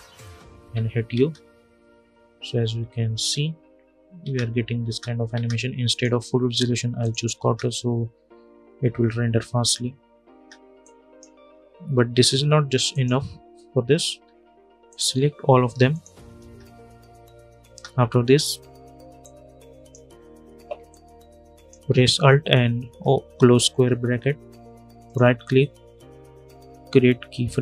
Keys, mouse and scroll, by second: 0.3 u, 0.9 space, 2.5 space, 3.9 space, 5.6 click, 7.1 space, 10.0 space, 10.8 click, 11.2 scroll up 1, 12.6 click, 13.8 u, 14.6 click, 14.9 scroll down 1, 15.6 shift+click, 16.2 space, 18.9-22.5 drag, 22.5 alt+], 23.9 scroll up 1, 24.8 right click.